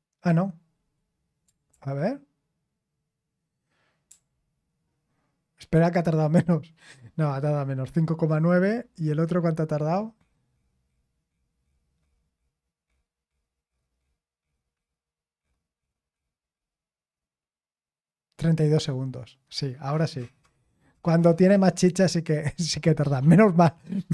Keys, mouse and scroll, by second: 1.7 ctrl+p, 4.1 ctrl+p.